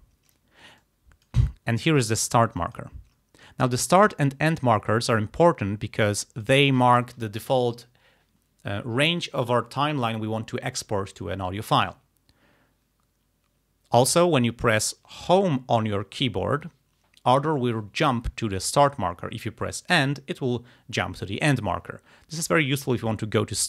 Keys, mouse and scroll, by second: 0.9 ctrl+click, 1.6-1.9 ctrl+scroll up 2, 2.6 click, 3.2 ctrl+scroll down 2, 3.5 ctrl+scroll up 2, 5.4-6.7 drag, 15.3 Home, 20.0 End.